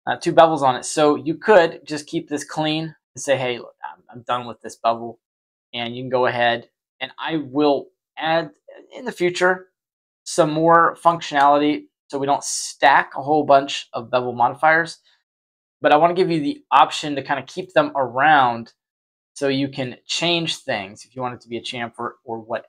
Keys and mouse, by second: 2.0-3.7 drag, 5.9-7.2 shift+drag, 7.6-8.9 shift+drag, 9.2-11.1 shift+drag, 14.1-17.5 middle drag, 20.3-21.9 drag, 22.4 middle drag.